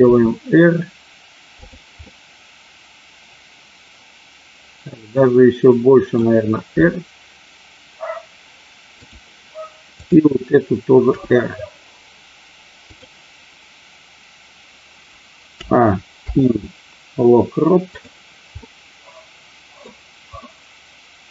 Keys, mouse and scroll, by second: 1.7 r, 2.0-6.2 middle drag, 6.8 r, 9.0 click, 9.9 click, 11.1 r, 12.9 click, 15.5 a, 16.1 i, 18.6-19.7 middle drag, 20.4-21.3 middle drag.